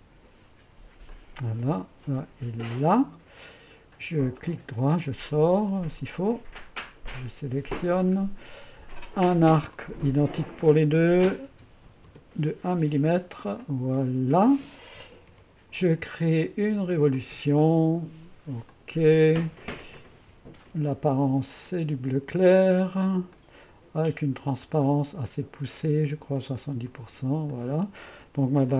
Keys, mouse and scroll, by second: 1.1 click, 2.7 click, 11.5 KP_1, 12.1 Return, 13.6-14.8 drag, 15.3 Return, 17.1 click, 18.7 click, 19.0 click, 20.0 click, 20.3 ctrl+click, 20.8 ctrl+d, 21.7 click.